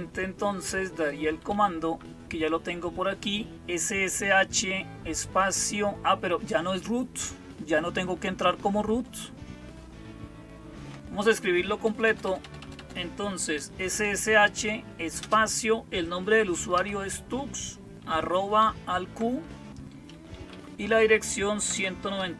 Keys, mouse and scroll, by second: 1.4 Up, 1.7 Up, 10.6 Down, 11.7-13.9 typing, 15.1 typing, 16.2-16.6 typing, 18.4 typing, 19.9-20.4 typing, 21.5-22.3 typing.